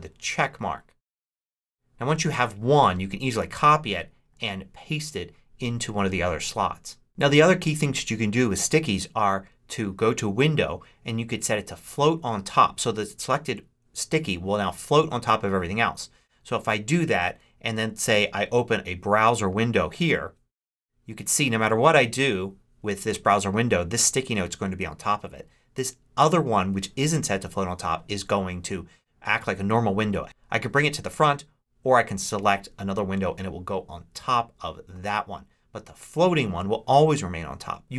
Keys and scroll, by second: 3.3 super+c, 4.3 super+v.